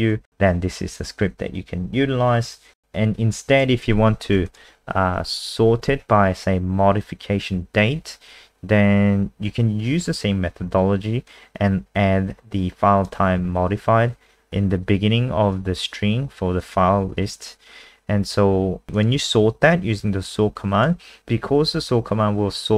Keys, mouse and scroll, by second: 3.8 ctrl+c, 4.5 click, 5.3 ctrl+a, 5.9 ctrl+v, 11.3 click, 18.9 click, 20.3 click.